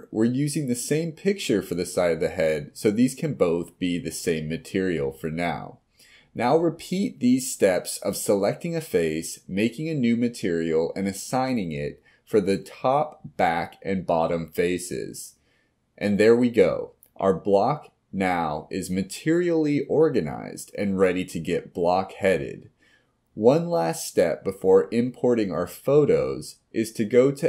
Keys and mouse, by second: 1.5 middle click, 5.7 middle click, 6.4 click, 7.9 click, 8.5 click, 8.9 click, 9.2 click, 10.3 click, 10.4-11.5 drag, 12.3 middle drag, 12.5 middle click, 12.7 click, 12.8 middle click, 13.6 click, 13.8 middle drag, 15.2 click, 15.7 click, 16.1 middle click, 16.2 click, 16.6 middle click, 17.1 click, 17.3 click, 17.5 click, 17.7 t, 18.0 click, 18.3 middle click, 19.2 middle click, 20.1-20.8 middle drag, 21.2 click, 21.7 click, 21.8-22.7 middle drag, 27.3 click.